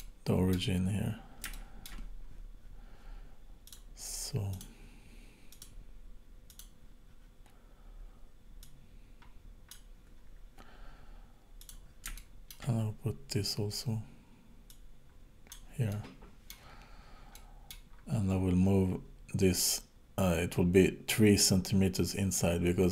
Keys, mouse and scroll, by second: 0.0 middle click, 0.8-1.2 scroll up 6, 1.6 shift+middle click, 3.7 click, 4.6 click, 5.5 click, 8.6 click, 11.6 click, 12.2 shift+middle click, 14.7 click, 15.9 middle click, 16.7-17.3 scroll down 4, 17.3 middle click, 18.0-19.0 scroll up 5, 21.7-22.4 scroll down 3, 22.4 middle click.